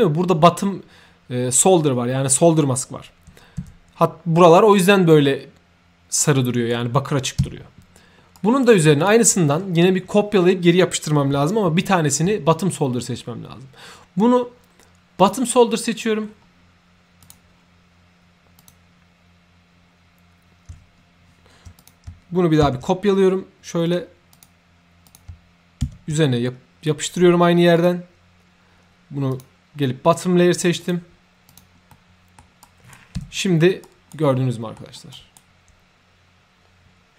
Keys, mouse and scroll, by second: 4.4 right click, 6.2-6.7 right drag, 6.6 2, 8.3 right click, 9.0 click, 15.1 ctrl+click, 16.2-16.6 scroll down 1, 17.2 click, 18.5 click, 21.8 ctrl+click, 22.7 ctrl+c, 23.8 click, 24.3 click, 25.0 click, 25.9 ctrl+v, 27.7 click, 29.3 click, 29.8-30.3 scroll up 3, 30.3 middle click, 30.8 click, 31.5 click, 31.9 middle click, 32.6 right click, 33.3 ctrl+3, 33.8 right click, 34.2 middle click, 34.4 ctrl+3, 35.1 right click.